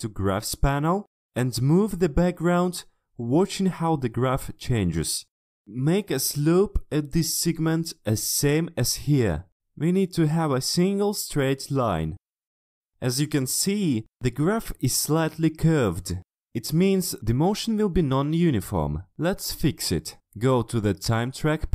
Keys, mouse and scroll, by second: 1.0 click, 4.6 shift+click, 6.2 shift+click, 16.4 shift+click, 18.1 shift+click, 21.1 click.